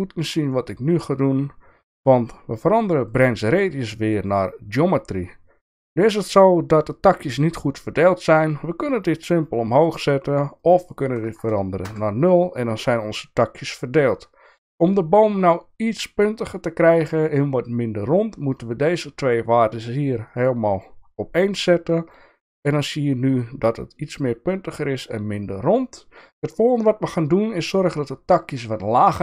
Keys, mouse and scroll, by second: 0.5 shift+middle click, 3.2-4.1 drag, 9.0 click, 10.7-12.6 drag, 20.2 click, 21.4 click.